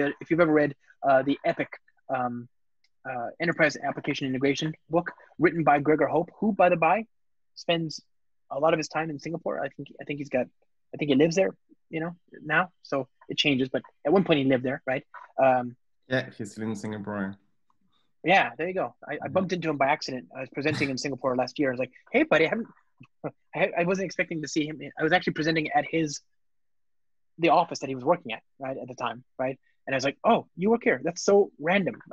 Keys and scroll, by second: 16.4 Return.